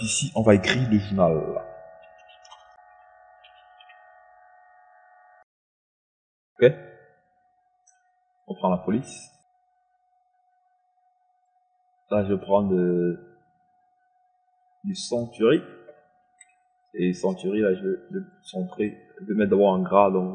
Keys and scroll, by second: 2.7-6.3 typing.